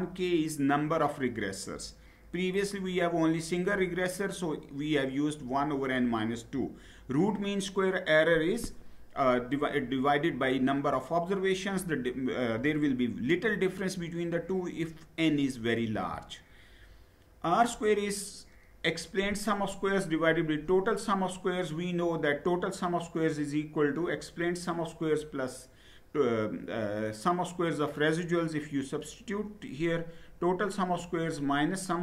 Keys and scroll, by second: 15.7 Down.